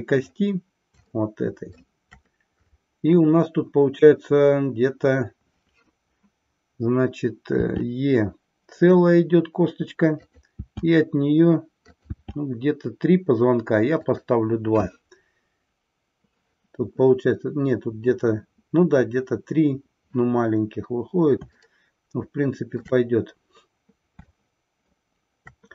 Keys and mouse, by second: 1.1 shift+middle click, 10.3 click, 12.0 click, 12.2 e, 14.2 click, 21.6-23.0 shift+middle drag, 24.3 shift+middle click.